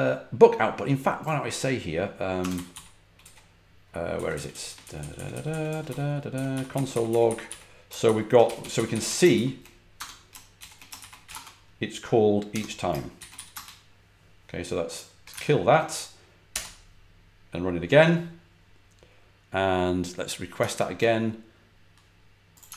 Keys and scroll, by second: 2.1-11.2 typing, 12.4 Escape, 13.2 w, 13.4 Return, 15.2 ctrl+c, 16.4 F5, 20.5 super+Tab, 22.6 super+r.